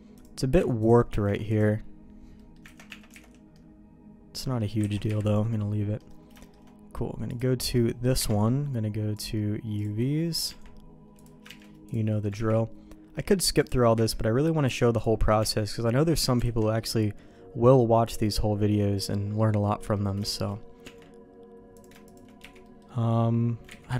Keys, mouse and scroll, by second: 1.1 ctrl+e, 2.3 middle click, 2.7 ctrl+z, 2.8 Tab, 3.2 alt+a, 3.5-4.5 middle drag, 4.8 ctrl+s, 5.1 KP_Divide, 5.9 middle click, 6.4 shift+middle click, 7.3 click, 8.1 KP_Divide, 9.1 click, 10.4 Tab, 11.1 click, 11.5 shift+g, 12.1 middle click, 12.3 ctrl+e, 13.9 a, 14.6 u, 15.4 Tab, 15.9 middle click, 16.4 alt+a, 16.9-19.0 middle drag, 19.9 middle click, 20.2 shift+middle click, 20.8 Tab, 21.7 click, 22.0 shift+click, 22.4 1, 22.6 middle click, 23.7 ctrl+z, 23.9 ctrl+z.